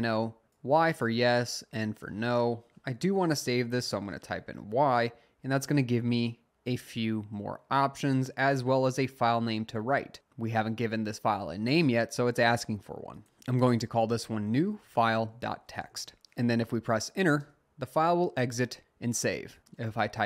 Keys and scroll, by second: 3.8 y, 13.4-16.4 typing, 17.4 Return, 19.8-20.2 typing.